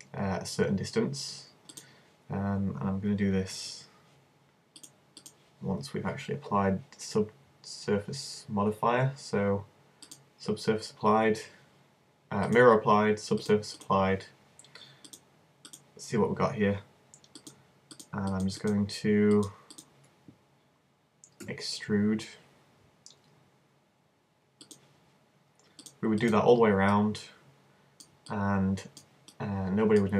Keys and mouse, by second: 1.8-3.6 drag, 3.6 super+z, 5.3 super+z, 10.1 click, 11.4 super+z, 15.9 click, 17.4-21.4 middle drag, 21.4 e, 24.7-25.8 drag, 26.4-27.6 drag, 27.6 middle click.